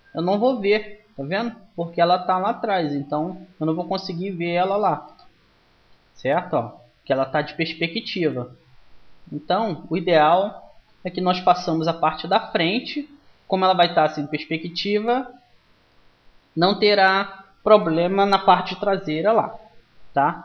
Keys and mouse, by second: 0.2-2.4 middle drag, 5.7 KP_1, 14.0-20.4 middle drag.